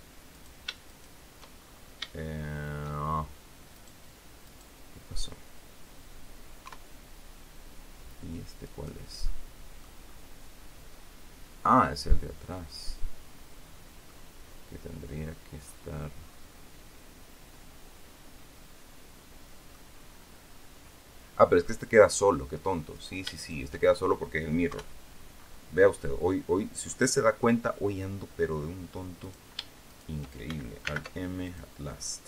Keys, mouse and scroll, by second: 0.2 right click, 0.8 shift+right click, 1.5-2.7 shift+scroll up 6, 2.1 shift+middle click, 3.6 right click, 4.3 right click, 6.5 KP_3, 8.5 right click, 9.1 middle click, 9.9 scroll down 1, 10.8 scroll down 1, 11.5-14.1 middle drag, 14.4-14.8 scroll up 4, 15.1-15.5 scroll down 2, 16.2-19.8 drag, 19.9-20.7 scroll up 2, 22.0 scroll down 2, 22.8 right click, 23.3 shift+right click, 23.7 shift+scroll down 2, 24.6 KP_3, 25.2 scroll up 2, 26.7 scroll up 2, 27.1 middle click, 29.1 right click, 29.8 shift+right click, 30.7 alt+m, 31.4 alt+click, 31.8-32.2 scroll down 4.